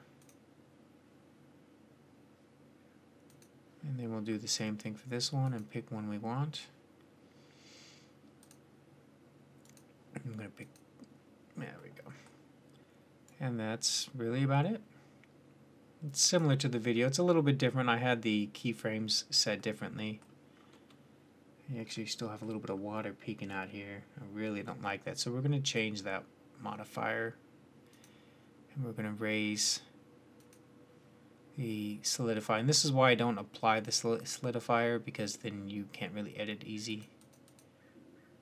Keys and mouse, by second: 3.1-7.2 drag, 9.5-11.4 drag, 11.7 click, 13.1-15.2 drag, 15.2-16.9 middle drag, 21.2-21.8 middle drag, 23.6-24.6 middle drag, 25.7-27.3 drag, 27.8-32.4 drag, 37.3 click, 37.5 middle click.